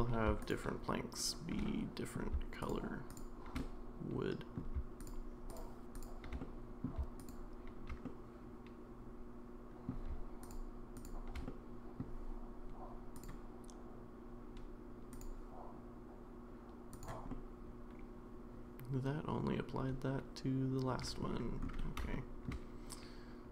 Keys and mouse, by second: 1.2 shift+click, 1.6-2.1 middle drag, 3.6-4.6 middle drag, 5.9 shift+click, 6.4-6.8 middle drag, 8.1-9.9 middle drag, 10.5 shift+click, 11.5-12.0 middle drag, 13.2-15.3 drag, 17.4-21.2 middle drag, 22.1-22.5 shift+middle drag.